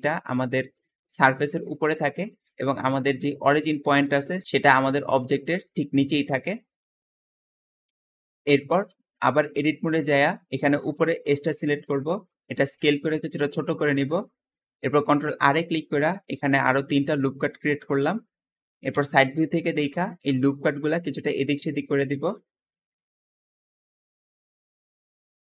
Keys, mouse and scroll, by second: 0.9 `, 1.2 click, 1.6 click, 2.4 Escape, 2.7 Tab, 3.0 middle click, 3.3 `, 3.6 click, 4.7 click, 5.4 click, 5.4 middle click, 6.2 Escape, 6.5 middle click, 6.8 Tab, 6.8-7.8 typing, 8.0-9.4 shift+middle drag, 9.4 Tab, 9.6-10.8 middle drag, 10.8 click, 11.4-12.0 scroll up 1, 12.0 shift+middle click, 12.7 s, 14.4 shift+middle click, 15.1 ctrl+r, 17.4-18.9 middle drag, 18.9 KP_3, 20.2-20.8 scroll up 2, 20.4 shift+middle click, 21.6 click, 22.2 shift+g, 22.8 click, 23.5-25.5 typing, 24.8 click, 25.4 scroll down 2.